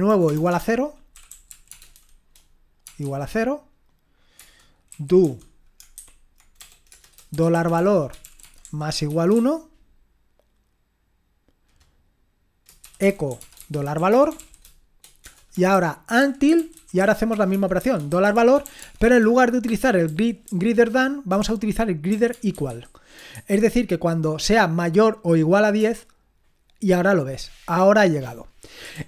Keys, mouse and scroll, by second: 0.0-3.0 typing, 4.4 Return, 4.9-9.3 typing, 12.6-23.3 typing, 25.8 Return, 28.9 ctrl+l.